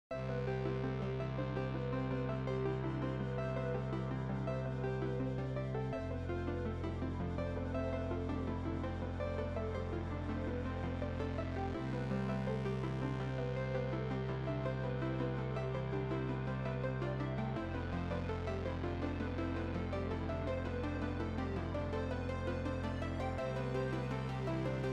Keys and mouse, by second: 0.5 alt+y, 1.7 click, 2.4 Escape, 2.7 click, 2.9 x, 3.0 click, 3.7 KP_5, 3.9 Return, 4.1 right click, 4.3 click, 4.8 right click, 5.1 click, 5.7 click, 6.0 right click, 6.2 click, 6.7 h, 7.2 click, 7.5 Caps_Lock, 8.0 click, 11.8 KP_5, 12.0 ctrl+1, 14.3 ctrl+q, 14.6 click, 20.4 ctrl+z, 20.6 click.